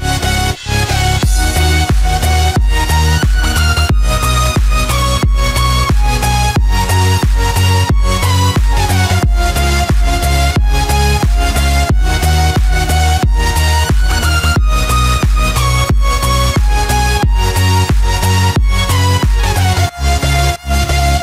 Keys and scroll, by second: 1.3 ctrl+-, 2.7 ctrl+=, 8.5 ctrl+=, 12.8 ctrl+-, 19.3 ctrl+z.